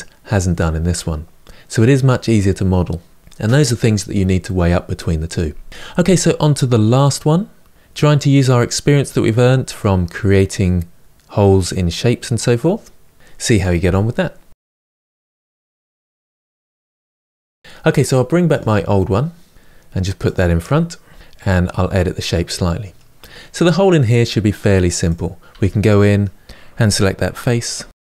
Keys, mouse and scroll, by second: 18.2 click, 18.6-19.3 scroll down 4, 19.3 click, 20.0 click, 20.8 h, 21.1-21.9 scroll up 1, 21.9-24.8 middle drag, 24.8 click, 25.2 Tab, 25.7-26.9 middle drag, 26.9 3, 27.0 click.